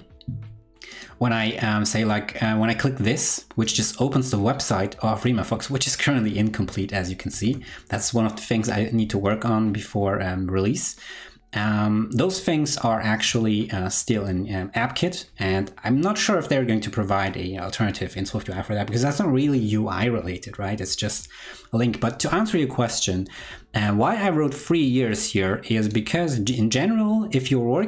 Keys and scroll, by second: 7.2 super+w.